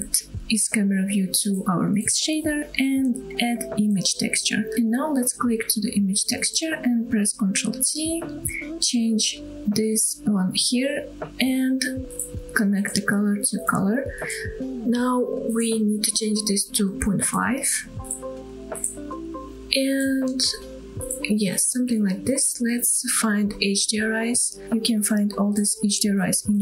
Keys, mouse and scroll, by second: 1.0 click, 1.3-1.6 scroll down 2, 1.6 shift+middle click, 1.6 click, 1.6 shift+a, 4.4 click, 5.0 click, 7.1 ctrl+t, 8.0-8.4 scroll up 4, 8.6-9.4 shift+middle drag, 10.2-10.9 drag, 11.1-11.5 scroll down 1, 11.5-12.0 shift+middle drag, 13.0-13.8 drag, 14.6 shift+middle click, 15.4-18.2 drag, 19.7-20.4 scroll up 3, 20.9-21.2 scroll down 1, 21.3-22.3 shift+middle drag, 23.0 click.